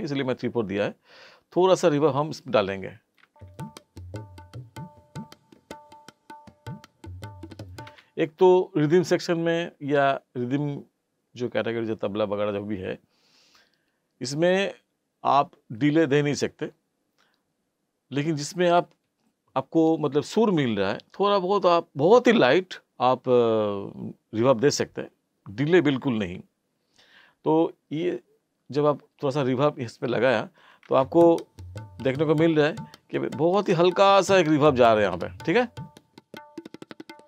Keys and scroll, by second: 3.3 space, 7.9 space, 30.9 space.